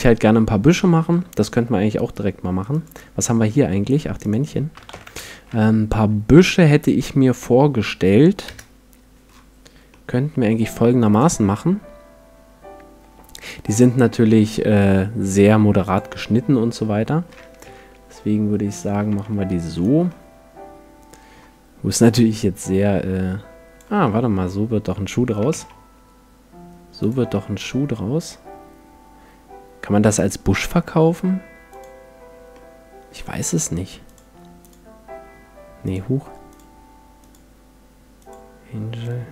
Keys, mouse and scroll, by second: 0.8-2.5 middle drag, 2.6 middle click, 2.7-6.0 drag, 4.9 shift+c, 5.3 shift+a, 8.5 KP_Decimal, 8.6 KP_Enter, 9.9-11.7 middle drag, 11.1-13.1 drag, 14.1-15.9 middle drag, 15.9-17.6 drag, 16.7 middle click, 17.6 t, 18.7-20.5 drag, 19.1 t, 19.7-21.5 right drag, 20.1-21.3 middle drag, 21.5 middle click, 22.3-24.4 drag, 24.0-25.9 middle drag, 25.4 s, 27.1-28.9 drag, 27.3-31.1 middle drag, 31.7-33.4 drag, 32.5-34.3 middle drag, 34.1-39.3 drag.